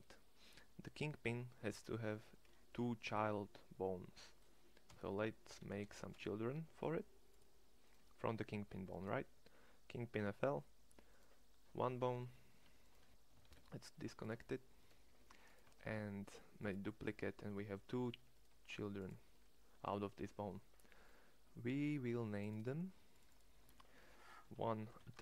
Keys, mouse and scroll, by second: 4.8 e, 13.3 alt+p, 14.9 g, 15.6 shift+d, 18.3 g, 25.1 t.